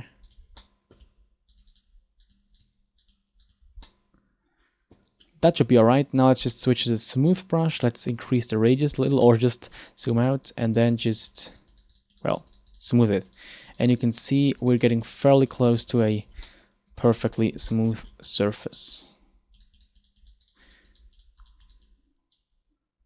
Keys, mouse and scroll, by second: 0.3 click, 0.7 middle click, 1.6 click, 1.8 click, 2.4 click, 2.7 click, 3.1 click, 3.5 click, 3.9 middle click, 6.3 click, 8.7-10.3 scroll down 4, 9.3 middle click, 10.3 click, 10.5 click, 10.9 click, 11.1 click, 11.3 click, 11.5 click, 11.7 click, 11.9 click, 12.1 click, 12.3 click, 12.5 click, 12.7 click, 12.9 click, 13.1 click, 13.3 click, 13.5 click, 13.7 click, 13.9 click, 14.1 click, 14.3 click, 14.5 click, 14.8 click, 15.0 click, 15.3 click, 15.5 click, 15.7 click, 15.9 click, 16.1 click, 16.3 click, 16.6 middle click, 17.8 middle click, 18.1 scroll up 4, 18.7 click, 19.8 click, 20.0 click, 20.2 click, 20.4 click, 20.6 click, 20.9 click, 21.1 click, 21.3 click, 21.6 click, 21.8 click, 22.5 click.